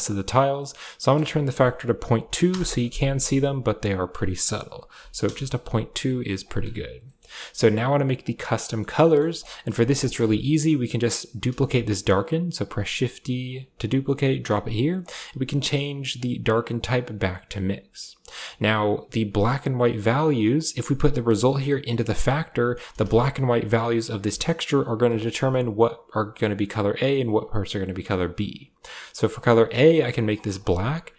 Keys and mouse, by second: 0.8-2.3 drag, 2.3 2, 3.9-5.1 drag, 6.3 click, 8.1 click, 8.5 middle click, 8.9 middle drag, 9.2 click, 9.6 g, 10.1 a, 10.8 click, 11.4 shift+d, 13.8 click, 14.9-17.5 drag, 18.3 drag, 20.2-22.4 drag, 22.9 ctrl+shift+click, 24.7 ctrl+shift+click, 29.2 click.